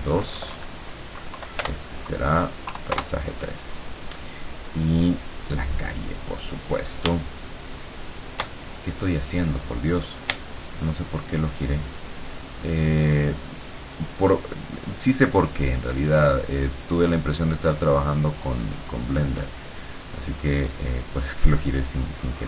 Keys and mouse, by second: 0.3 BackSpace, 1.4 Left, 1.7 BackSpace, 2.7 KP_3, 3.0 KP_Enter, 7.3-8.7 shift+middle drag, 10.5-17.1 shift+middle drag, 17.1-19.3 shift+drag, 20.5-22.4 drag.